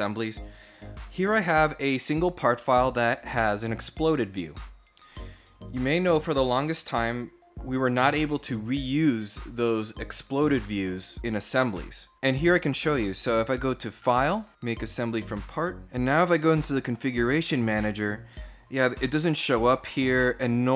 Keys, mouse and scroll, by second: 13.1 click, 14.5 click, 16.4 click, 17.7 right click, 18.6 click, 19.3 right click, 19.9 click.